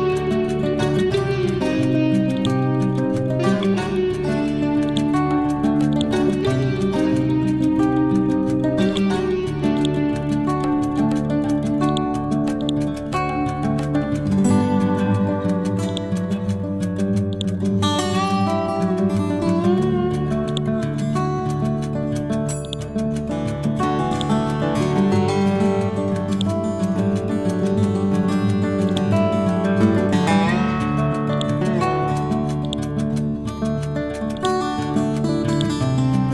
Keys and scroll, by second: 7.1 ctrl+Home, 13.2 ctrl+z.